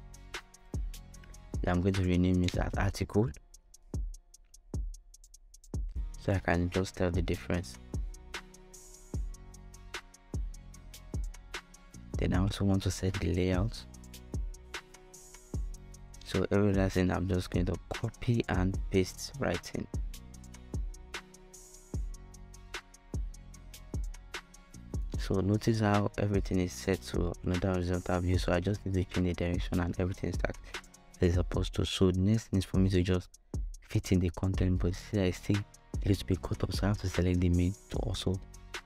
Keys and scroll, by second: 1.2-4.6 typing, 17.4 shift+super+c, 18.0 super+c, 21.6 super+v.